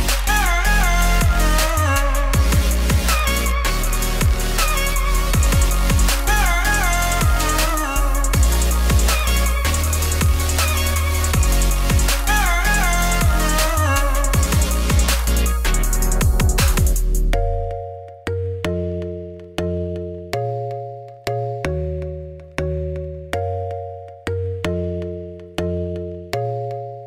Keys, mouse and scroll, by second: 1.4 middle click, 1.6 scroll, 1.6 scroll up 3, 1.9 middle click, 2.7-3.6 scroll down 1, 3.6-8.6 middle drag, 8.6 Tab, 9.0-10.5 middle drag, 12.4 click, 13.0 KP_Divide, 13.3 scroll down 6, 13.4 shift+middle click, 13.7 scroll up 2, 13.9 shift+middle click, 14.4 scroll down 1, 14.6 a, 16.2 middle click, 16.5 scroll up 1, 16.6 Tab, 17.0 middle click, 17.6-18.3 scroll down 2, 18.3 middle click, 18.7-19.6 scroll up 2, 19.6 click, 19.8 shift+middle click, 20.4 Tab, 20.6 middle click, 21.3 click, 21.9 l, 22.5 middle click, 22.9 3, 23.1 click, 23.6 x, 24.2 ctrl+z, 24.4 ctrl+z, 25.3 click, 26.4 click, 26.5 x.